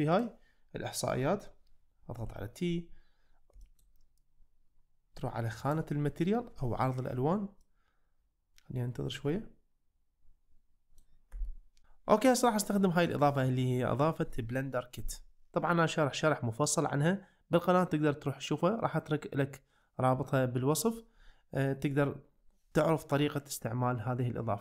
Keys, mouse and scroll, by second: 2.2 t, 3.6 shift+middle click, 5.7-7.7 drag, 7.7-11.1 middle drag.